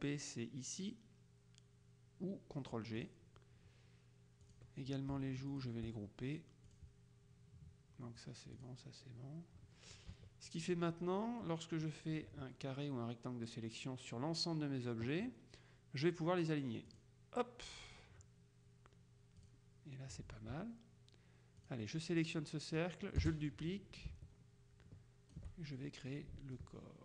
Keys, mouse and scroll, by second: 3.1 click, 4.5 click, 5.6 shift+click, 6.8 click, 8.7 click, 10.2 KP_Subtract, 11.9-14.1 drag, 17.0 click, 19.5 click, 21.7 click, 22.9-25.9 drag, 23.3 space, 26.6-27.0 ctrl+shift+drag.